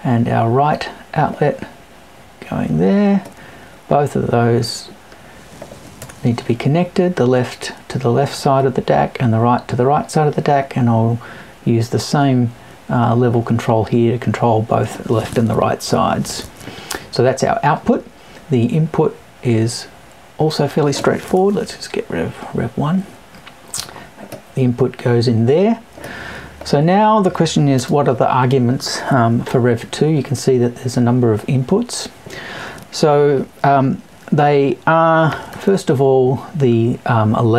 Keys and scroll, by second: 6.0 BackSpace, 21.3 BackSpace.